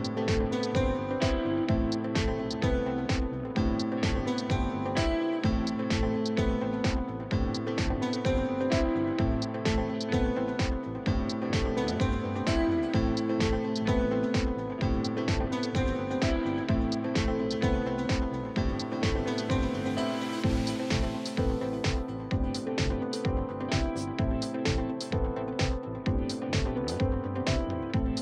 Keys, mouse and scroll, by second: 0.2 click, 0.8 middle click, 1.4 click, 2.2 middle click, 2.5 s, 3.2 middle click, 3.6 click, 5.1 middle click, 5.8 scroll up 1, 5.8 middle click, 6.1 scroll down 4, 6.2 middle click, 6.5-7.1 scroll up 2, 7.1 ctrl+click, 7.3 middle click, 8.5 middle click, 8.8 click, 9.0 middle click, 9.5 scroll down 12, 9.7 middle click, 10.0 Tab, 10.1 middle click, 10.3 scroll down 1, 10.3 scroll up 3, 10.5 shift+middle click, 10.7 scroll down 3, 11.0 shift+s, 11.5 shift+s, 12.0 middle click, 12.2 scroll down 5, 12.3 middle click, 12.6-13.2 scroll up 2, 13.2 scroll down 1, 13.4-14.5 middle drag, 15.0 scroll up 2, 15.1-16.9 shift+middle drag, 22.5-23.6 scroll down 1, 25.7 click, 26.2-28.2 drag.